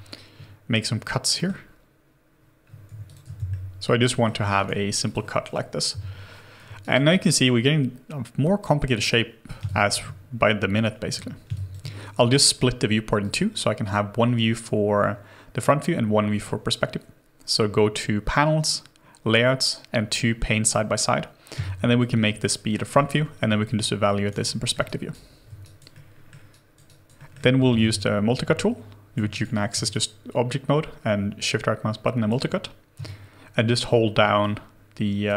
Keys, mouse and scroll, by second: 1.3 ctrl+middle click, 2.9 ctrl+middle click, 2.9 w, 3.4 ctrl+b, 3.5 ctrl+middle click, 4.4 q, 5.9 Delete, 6.8 alt+right click, 7.1 alt+click, 9.6 space, 11.4 space, 12.3 alt+right click, 21.5 space, 22.6-23.3 scroll up 1, 23.5 alt+click, 23.8 alt+right click, 24.4 alt+middle click, 24.8 alt+right click, 25.6 alt+right click, 25.9 alt+middle click, 26.5 alt+right click, 27.2 alt+middle click, 27.9 alt+c, 29.1 w, 29.3 right click, 29.9 shift+right click, 33.0 shift+click.